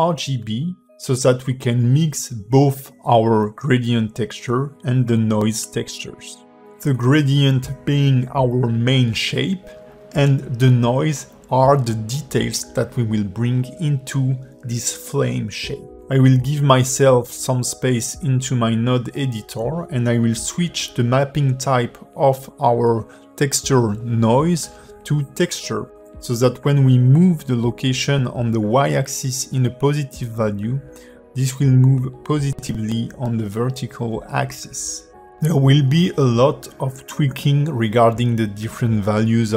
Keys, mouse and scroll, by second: 0.4 click, 2.0 ctrl+shift+click, 3.8 click, 5.8 shift+a, 9.7 click, 12.0 click, 14.4 ctrl+shift+click, 17.7 click, 19.2 click, 20.3 g, 23.5-24.6 scroll up 4, 24.6 click, 28.9 click, 32.6 click, 36.3-37.4 scroll up 5, 37.4 click.